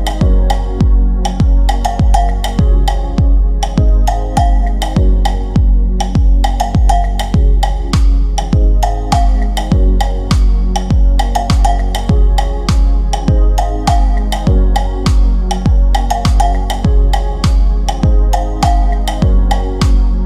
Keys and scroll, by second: 11.6 Delete, 14.9 Delete.